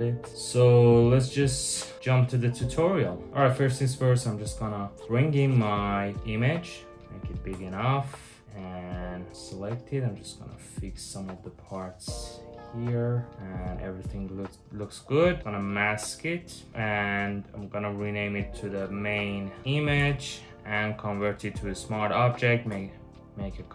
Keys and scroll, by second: 3.9 super+v, 4.5 super+t, 7.1 Return, 7.6 w, 18.2-21.4 typing, 22.3 super+j.